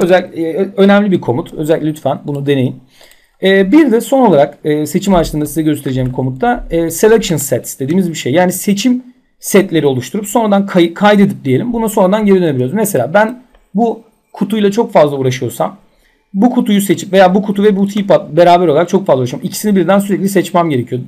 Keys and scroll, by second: 0.0 Delete, 5.2 z.